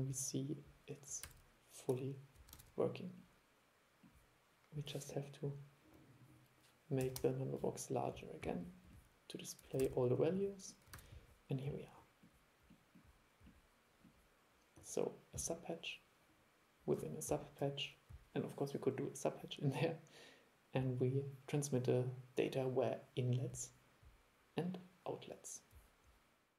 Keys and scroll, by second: 1.3 super+e, 2.6 super+e, 9.9 super+e, 11.0 super+e.